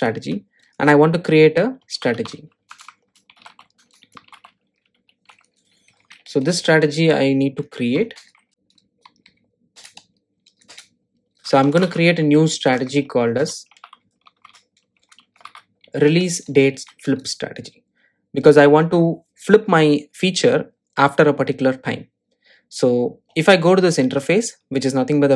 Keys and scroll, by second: 2.7 Return, 7.2 alt+Return, 17.7 Return, 23.9 super+b.